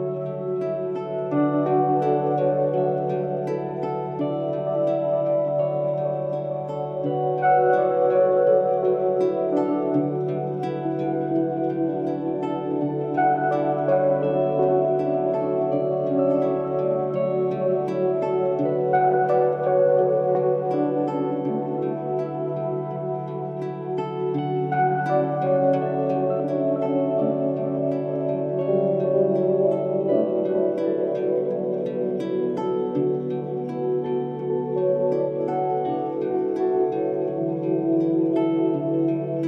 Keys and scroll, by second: 0.5 ctrl+j, 0.7 ctrl+t, 3.1 ctrl+j, 3.2 ctrl+t, 5.7 ctrl+s, 9.4 ctrl+shift+i, 11.9 ctrl+j, 12.7 ctrl+y, 13.0 ctrl+t, 15.2 ctrl+z, 17.1 ctrl+d, 18.6 ctrl+z, 19.2 ctrl+z, 23.7 ctrl+j, 24.2 ctrl+t, 25.3 ctrl+t, 26.6 ctrl+t, 27.8 ctrl+j, 28.0 ctrl+t, 29.6 ctrl+z, 30.1 ctrl+t, 31.0 ctrl+g, 31.3 ctrl+j, 31.4 ctrl+t, 35.2 ctrl+s, 35.6 ctrl+g.